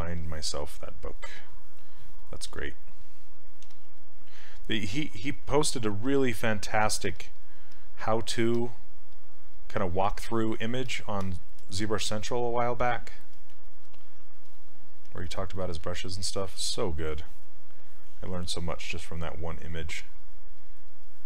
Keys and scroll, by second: 2.6 s, 3.7 s.